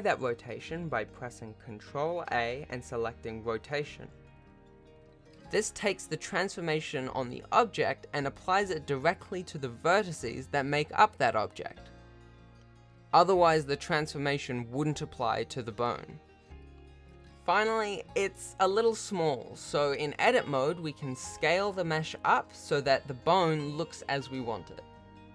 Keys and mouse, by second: 0.5 ctrl+a, 1.4 r, 3.0 shift+e, 4.0 shift+r, 4.6 r, 7.0 ctrl+a, 9.0 Tab, 9.4 a, 9.6 s, 10.5 g, 12.6 Tab, 14.5 Tab, 14.8 a, 15.0 s, 16.0 g, 17.0 Tab, 17.8 Tab, 18.1 g, 19.5 Tab, 20.3 shift+click, 21.3 Tab, 21.6 g, 22.8 Tab, 23.5 shift+drag, 24.9 Tab, 25.2 click.